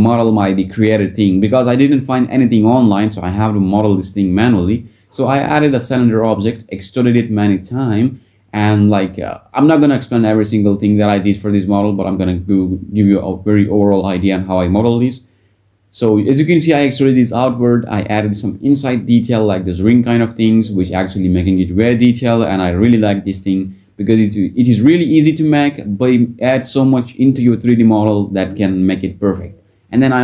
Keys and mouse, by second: 0.7 click, 1.9 Tab, 3.2 click, 3.6 click, 4.5 x, 11.4 s, 12.3 a, 13.0 alt+e, 16.2 alt+e, 20.0 ctrl+r, 20.3 click, 20.5 click, 21.1 ctrl+b, 22.5 alt+e, 24.7 click, 26.5 Tab, 28.0-28.5 right drag.